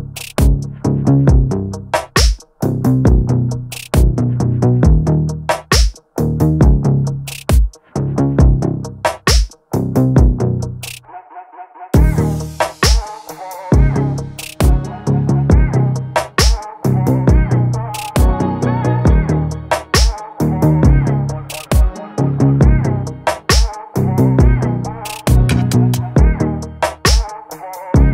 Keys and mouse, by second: 0.7 middle click, 1.6 shift+a, 6.2-7.5 drag, 8.2-9.2 drag, 11.1 middle click, 11.9 click, 13.0 shift+a, 20.1-21.0 drag, 22.7 middle click, 23.7 shift+a.